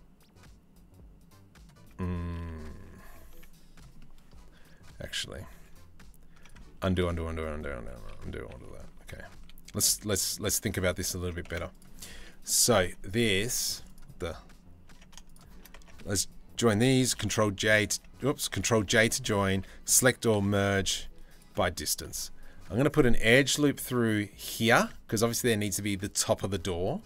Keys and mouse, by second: 1.9 ctrl+z, 2.9 Tab, 3.7-4.9 middle drag, 5.1 z, 6.5 ctrl+z, 6.7 ctrl+z, 6.9 ctrl+z, 7.0 ctrl+z, 7.2 ctrl+z, 7.6 ctrl+z, 7.8 ctrl+z, 7.9 ctrl+z, 8.2 ctrl+z, 8.4 ctrl+z, 8.7 ctrl+z, 9.0 ctrl+z, 9.7 ctrl+z, 10.0 ctrl+z, 10.7 ctrl+z, 11.1 Tab, 11.7 Tab, 13.1 Tab, 13.8 Tab, 14.6 Tab, 15.4 Tab, 15.7 a, 16.8 ctrl+j, 17.6 Tab, 18.6 ctrl+j, 18.9 Tab, 19.1 a, 19.9 m, 21.7 ctrl+r, 24.8-26.1 middle drag.